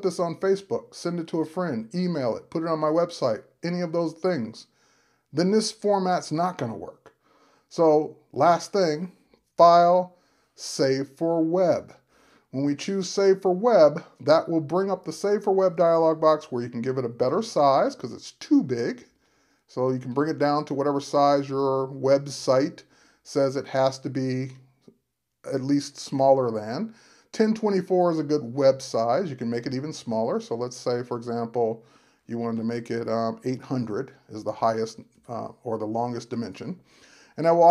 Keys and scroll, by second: 22.3 Tab, 35.1 Tab.